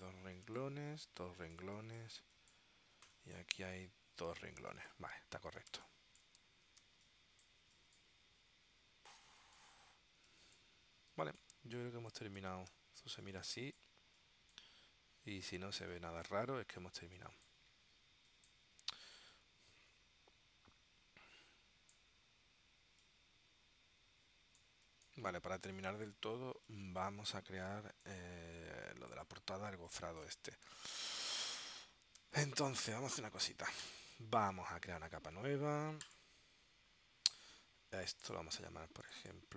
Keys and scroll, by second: 4.7 space, 5.8 space, 7.0 space, 12.8 w, 13.1 space, 32.3 space, 33.1 w.